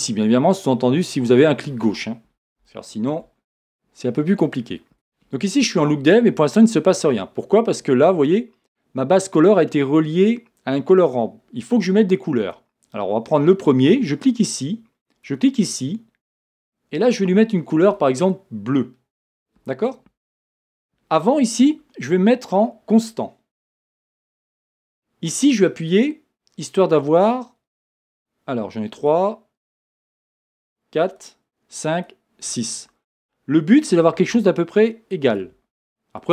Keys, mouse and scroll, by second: 2.7-12.6 shift+middle drag, 3.3-3.8 scroll down 1, 4.5-4.9 scroll up 1, 4.9 z, 12.6-16.3 drag, 23.7-26.0 drag, 27.8-36.3 drag.